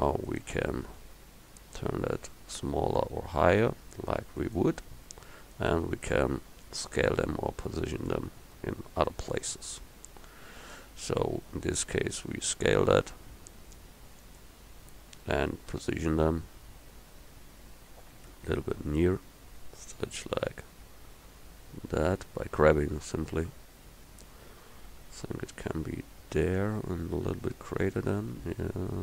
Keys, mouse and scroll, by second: 1.1 s, 1.7 click, 9.4 g, 11.3 s, 16.3 g, 27.5 s.